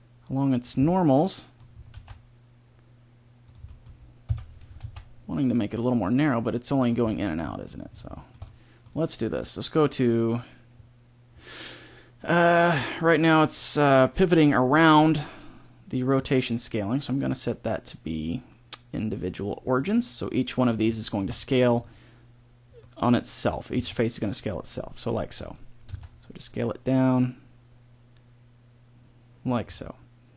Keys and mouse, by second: 0.8 middle click, 1.9 alt+s, 4.2 KP_1, 4.8 alt+s, 7.0 middle click, 16.1-17.9 drag, 20.9-23.7 middle drag, 23.7 s, 25.9 s, 29.7 middle click.